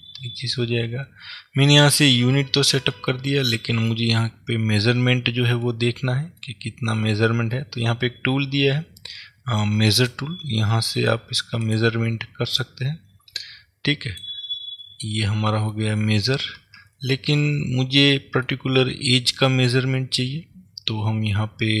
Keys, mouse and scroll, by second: 3.1-10.0 middle drag, 10.0 click, 11.8 click, 12.7 click, 15.0 scroll up 1, 15.0-21.8 middle drag, 17.0 ctrl+z.